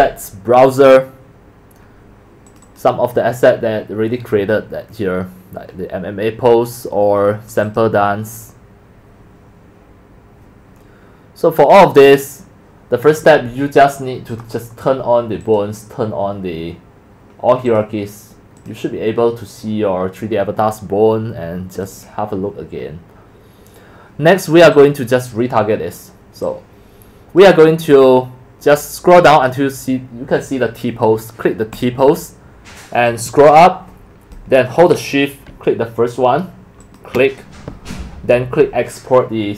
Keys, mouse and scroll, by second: 2.5 click, 2.6 click, 14.3 click, 15.4 click, 17.7 click, 18.6 click, 19.9 click, 20.5 click, 21.8 click, 21.9 click, 24.7 click, 26.5-27.4 drag, 27.9-29.5 drag, 31.8 click, 33.1-34.3 drag, 36.8 shift+click, 37.4-37.8 scroll down 1, 38.3 shift+click.